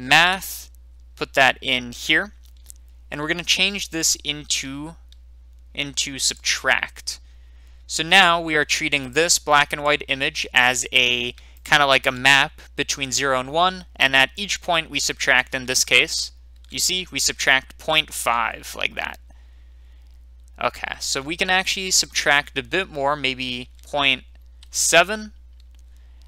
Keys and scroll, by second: 0.0-0.1 typing, 0.2 Return, 24.5 7, 24.7 Return.